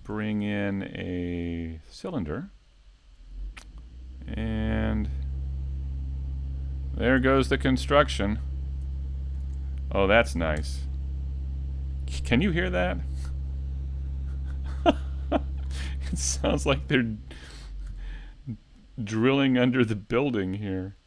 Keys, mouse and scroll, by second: 0.3 middle click, 2.1 scroll up 1, 9.6-9.9 scroll up 2, 9.9 shift+middle click, 10.3 middle click, 10.8 shift+middle click, 11.2 Tab, 11.8 scroll down 1, 12.9 ctrl+r, 16.1 click, 17.4-17.8 scroll up 2, 18.5 alt+right click, 19.9 click.